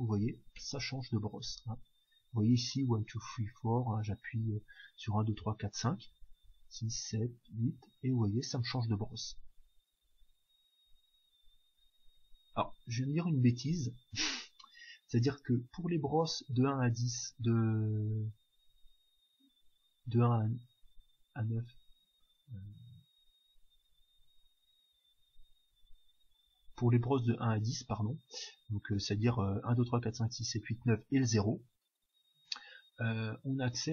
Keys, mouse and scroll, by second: 0.2 2, 0.5 3, 1.4 4, 4.3 5, 6.1-7.8 typing, 8.9-12.5 typing, 13.6 1, 18.6 0, 19.9 9, 20.8 9, 21.1 8, 21.7 7, 22.2-24.1 drag, 25.2 9, 25.7 0, 26.4 9, 27.6 0, 33.5-33.9 drag.